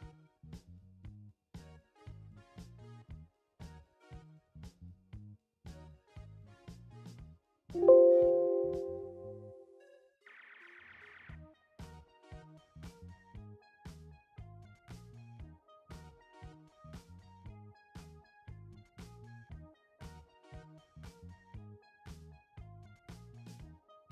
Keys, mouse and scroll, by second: 2.0-3.8 typing, 6.8 click, 9.2-11.0 drag, 10.8-14.8 typing, 16.4 click, 21.9-23.9 drag.